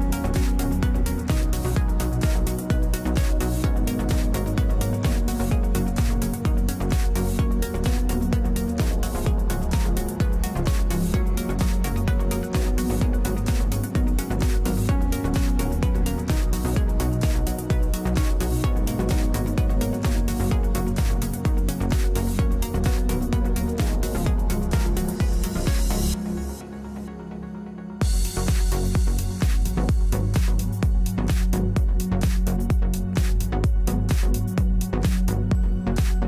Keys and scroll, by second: 8.4 3, 20.2 w, 24.5 1.